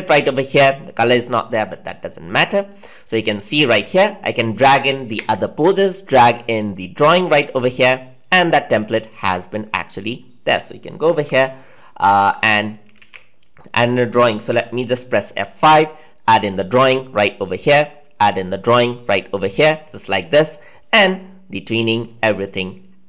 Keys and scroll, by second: 11.1 F5, 14.4 F5.